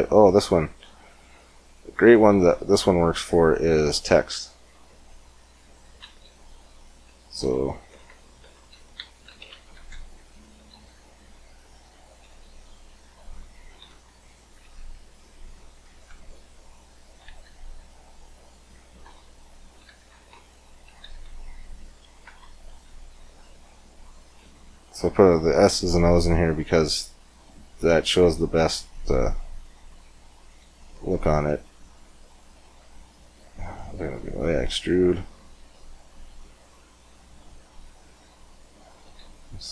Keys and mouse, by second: 1.8-3.0 drag, 2.2 x, 3.0 shift+a, 7.2 Tab, 7.7-14.6 typing, 15.8 Tab, 16.8 r, 19.4 r, 20.7 r, 27.8-28.8 middle drag, 30.0-33.2 drag, 33.2 middle click, 33.4-36.6 drag, 36.6 middle click, 39.0 s.